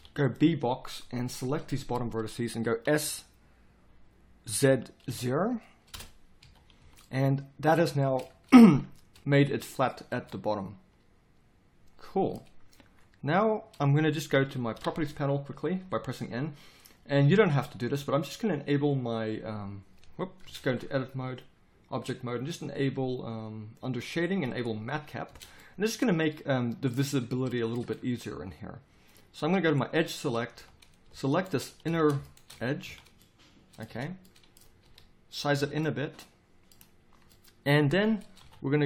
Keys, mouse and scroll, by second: 2.8 s, 6.4 a, 6.8 z, 14.7 n, 20.4 Tab, 25.3 Tab, 30.5 z, 33.9 z, 34.8 s, 35.5 z, 38.4 KP_7.